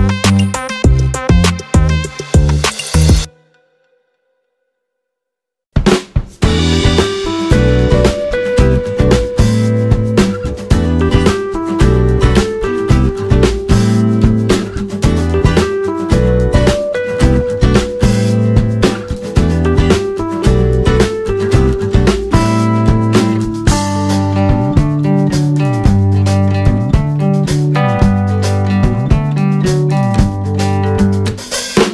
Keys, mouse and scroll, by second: 8.4 click, 8.9 click, 9.5-12.9 drag, 13.2 click, 13.8 click, 14.2 alt+click, 14.4 click, 15.4 ctrl+click, 16.1 click, 16.7 alt+click, 16.9 click, 17.6 alt+click, 17.8 click, 18.5 alt+click, 18.7 click, 19.4 click, 20.0 alt+click, 20.1 click, 20.8 click, 22.1 alt+click, 22.2 click, 22.7 alt+click, 23.4 click, 23.8 alt+click, 24.1 alt+click, 24.7 alt+click, 25.3 ctrl+z, 26.6 click, 27.2 click, 27.3 click, 28.0 alt+click, 28.1 click, 29.0 click, 29.7 click, 30.7 alt+click, 30.9 click, 31.3 ctrl+z, 31.7 alt+click, 31.8 click.